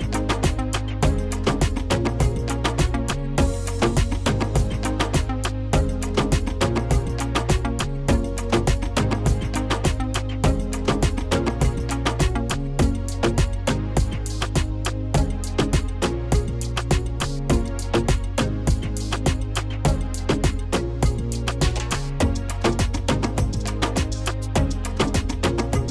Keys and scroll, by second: 15.4 Delete, 16.3 Delete.